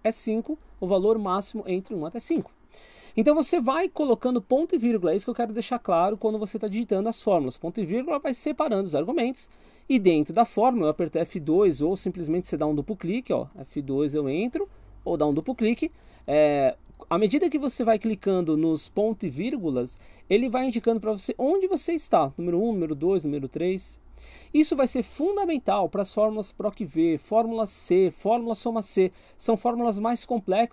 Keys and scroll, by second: 12.1 Escape, 13.4 F2, 15.0 Escape.